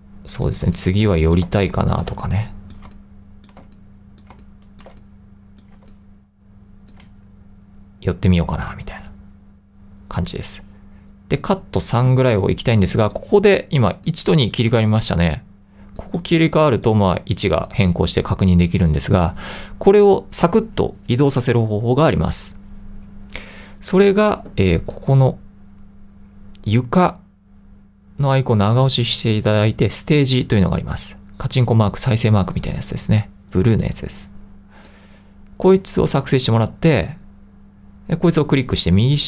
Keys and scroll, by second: 0.0-6.0 typing, 9.9-10.6 typing.